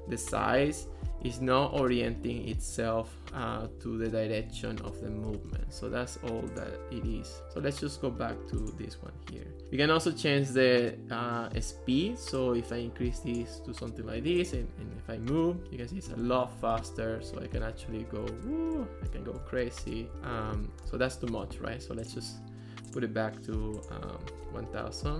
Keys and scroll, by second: 0.0-2.4 typing, 3.5-6.3 typing, 15.3-21.1 typing, 24.0-25.0 typing.